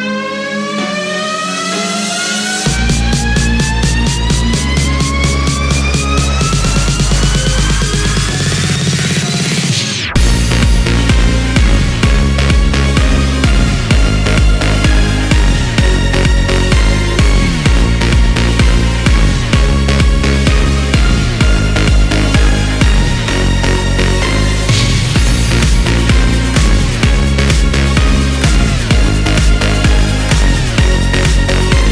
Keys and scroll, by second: 0.0 ctrl+k, 16.6 ctrl+q.